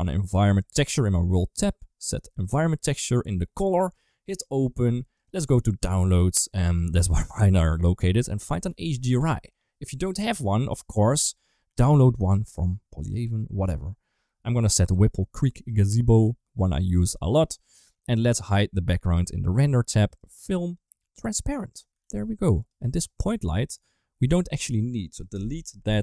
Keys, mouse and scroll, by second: 0.4 click, 1.4-2.4 drag, 3.7 click, 18.3 click, 20.0 click, 21.0 click, 21.9 ctrl+s, 22.5 click, 23.1 g, 25.2 Delete, 25.8 middle click.